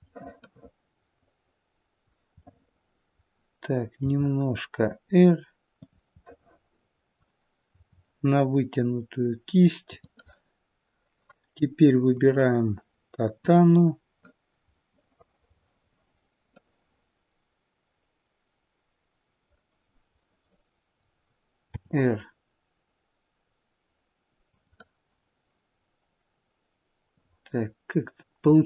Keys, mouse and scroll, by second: 0.0 middle click, 2.4 middle click, 3.9 r, 6.1 middle click, 7.6 r, 12.1 click, 13.3 click, 14.7 middle click, 16.2 middle click, 20.3 middle click, 21.5 r, 27.0 click, 28.4-28.6 scroll up 4.